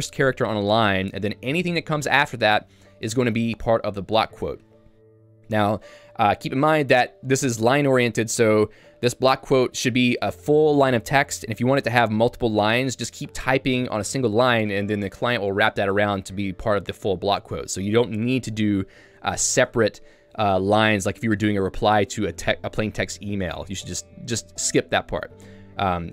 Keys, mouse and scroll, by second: 0.8 l, 18.5-20.7 typing, 21.3 Return, 21.9-24.1 typing, 22.7 Escape, 25.5 x.